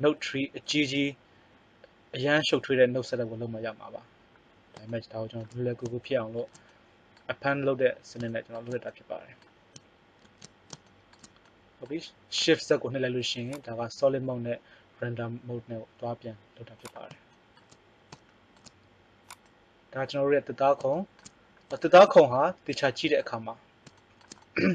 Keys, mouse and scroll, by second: 10.3 shift+z, 13.2 click, 18.4 middle click, 19.1 right click, 20.3 middle click, 22.7 middle click.